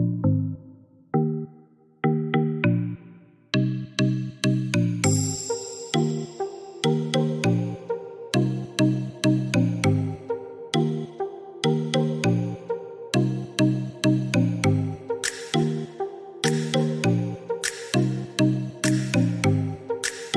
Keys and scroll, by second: 3.0 Escape, 7.2-8.2 typing, 12.5-13.3 typing.